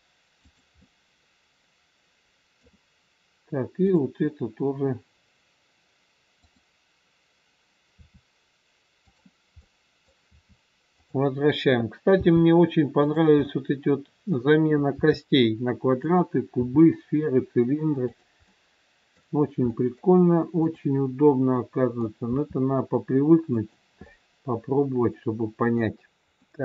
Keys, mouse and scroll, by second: 0.7 middle click, 3.8 click, 6.4 click, 7.9 r, 9.6 middle click, 10.1 r, 12.1 g, 13.4 middle click, 14.9 r, 16.6 g, 18.6 middle click, 19.7 middle click, 20.5 click, 21.4 middle click, 22.3 r, 24.0 middle click.